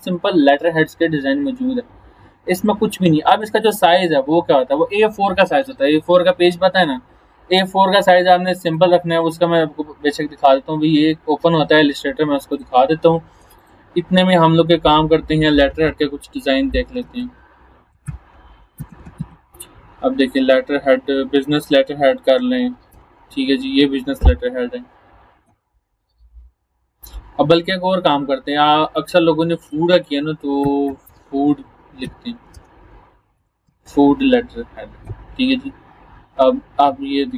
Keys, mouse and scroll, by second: 0.0 click, 3.3 click, 8.7 click, 9.3 click, 12.6 click, 15.8-19.7 typing, 22.9 Return, 24.9 scroll down 1, 26.8 scroll down 1, 27.0 scroll up 1, 29.2-29.8 click, 30.4-33.3 typing, 33.6 Return, 36.4 scroll down 1.